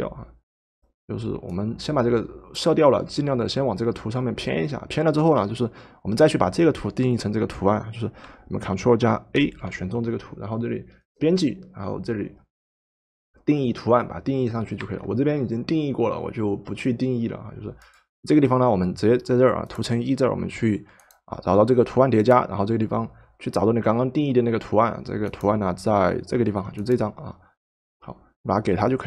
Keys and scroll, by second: 9.3 ctrl+a, 14.8 Escape.